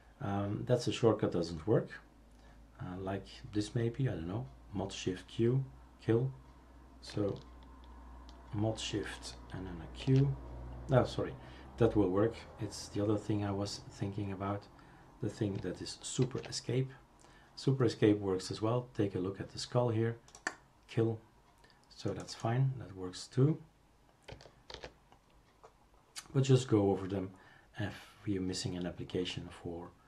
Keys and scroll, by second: 10.0 shift+super+q, 16.2 super+Escape, 24.7 super+f.